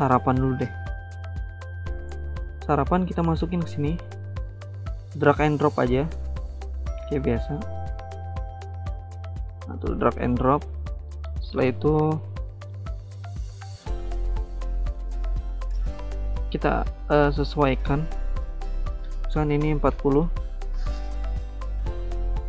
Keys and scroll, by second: 2.5 alt+Tab, 5.5 alt+Tab, 6.1 alt+Tab, 7.1 alt+Tab, 19.2-20.1 typing, 20.1 Return.